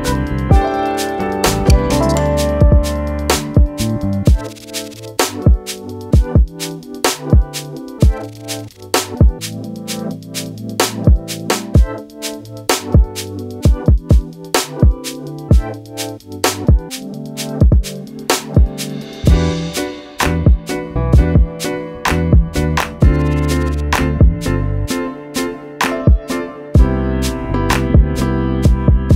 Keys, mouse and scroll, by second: 0.0-0.5 typing, 0.6 click, 2.0 click, 2.8 alt+shift+click, 3.3 click, 4.0 shift+click, 4.5 alt+shift+click, 4.9 scroll up 1, 5.7 Caps_Lock, 6.6-9.6 typing, 6.9 click, 9.6 click, 11.3 click, 13.2 click, 18.9 scroll down 1, 19.5 click, 21.0 click, 21.3 scroll down 1, 22.1 right click, 22.3 click, 25.4 Caps_Lock, 25.4 click, 25.6 scroll up 1, 26.1 click, 28.3 scroll down 1, 28.8 click.